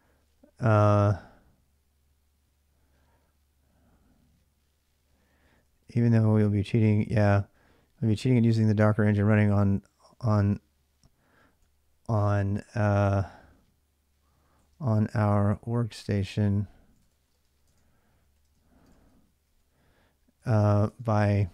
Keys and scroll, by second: 5.2-7.9 typing, 9.9-11.9 typing, 14.1-21.5 typing.